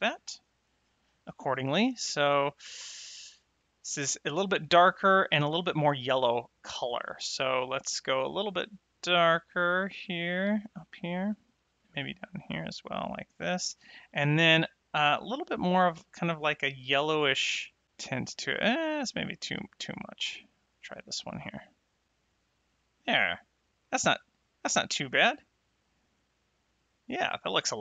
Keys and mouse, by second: 2.4 middle click, 3.5 middle click, 8.0 click, 11.7 click, 15.3 click, 20.7 click, 23.1 middle click, 24.6 space.